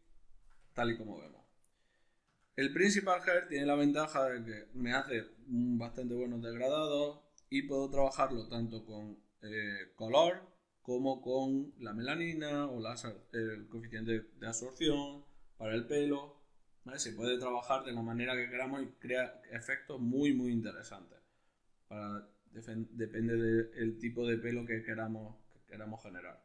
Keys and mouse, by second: 0.8-8.0 ctrl+middle drag, 8.0-20.2 drag, 20.7-26.4 drag.